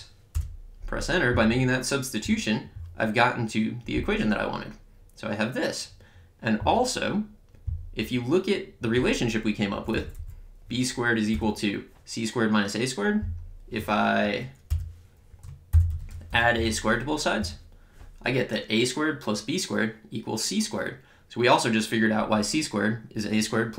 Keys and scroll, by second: 0.3 Return, 9.7 Up, 11.3 Return, 15.6-17.0 typing, 17.4 Return.